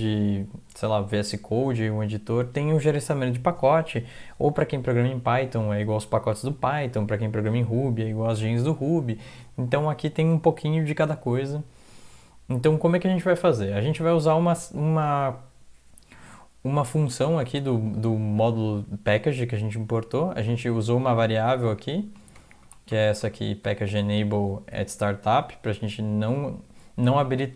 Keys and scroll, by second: 0.0-0.6 typing, 16.1 Up, 17.3 typing, 18.0 Left, 20.3 Up, 20.5 Up, 20.7 Up, 21.0 ctrl+Right, 21.1 ctrl+Right, 21.7 ctrl+Left, 22.4 ctrl+shift+Right, 22.6 ctrl+shift+Right, 22.9 ctrl+shift+Right, 23.2 ctrl+shift+Right, 27.3 Down, 27.5 Down.